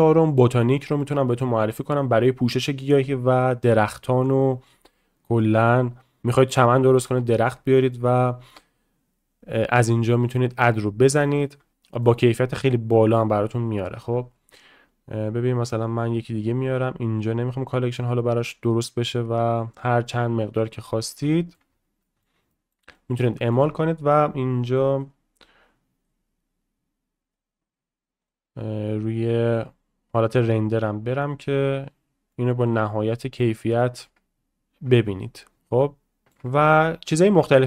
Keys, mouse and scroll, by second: 1.3-10.9 right drag, 12.0 shift+middle click, 12.3-13.2 middle drag, 13.7-17.9 right drag, 17.9 click, 19.5-20.4 drag, 21.3 shift+middle drag, 22.0-22.7 shift+middle drag, 22.9 middle drag, 23.3 shift+middle drag, 24.5-25.2 drag, 25.7-26.2 drag, 28.1 click, 32.3-32.6 shift+middle drag, 33.1 middle click, 33.8 shift+middle drag, 36.2 shift+middle click, 37.0-37.6 drag.